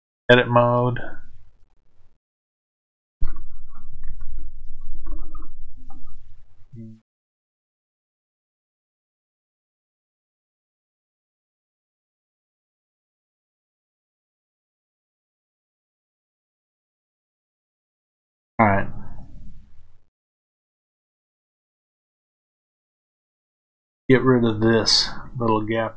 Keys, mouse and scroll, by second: 0.6-5.0 drag, 3.8 a, 5.0-23.4 middle drag, 21.0 KP_7, 23.4 click.